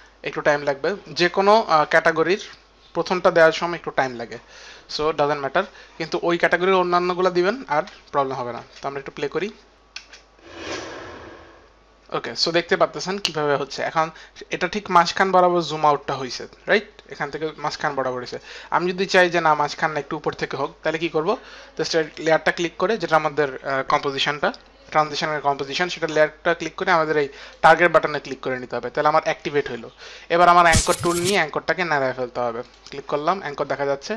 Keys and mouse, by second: 1.4 click, 8.8 space, 9.7 click, 10.1 space, 12.7 click, 13.5 click, 13.5 space, 22.1 click, 27.6 click, 31.9 click, 33.1 click.